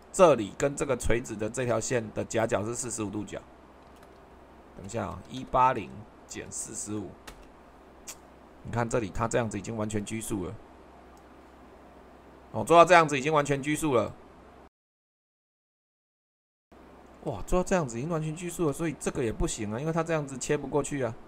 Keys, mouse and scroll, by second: 4.2-6.8 typing, 7.3 Return, 10.0-12.1 drag, 14.0 click, 15.2 click, 17.8 super+2, 20.1 super+2.